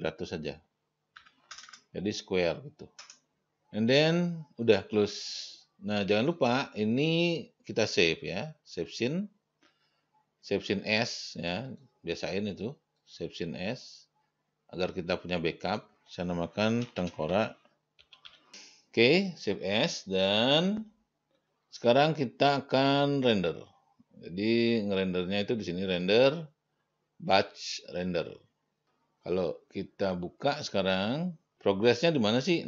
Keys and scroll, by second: 1.4 7, 1.8 0, 3.2 Return, 17.2-19.0 typing.